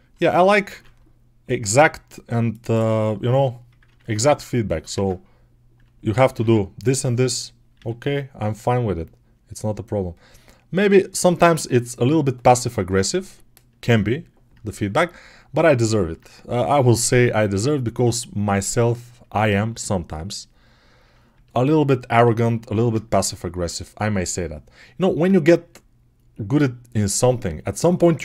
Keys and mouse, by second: 0.5 ctrl+r, 1.8 click, 2.4 right click, 2.6-4.7 middle drag, 3.7 ctrl+Tab, 4.8 ctrl+Tab, 6.3 ctrl+Tab, 7.0-8.2 middle drag, 7.6 g, 8.2-28.2 drag.